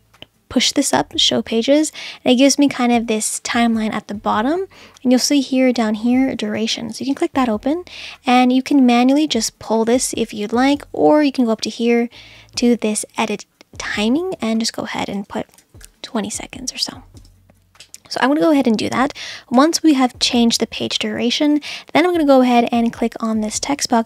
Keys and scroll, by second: 15.4-16.3 typing, 17.2 Return.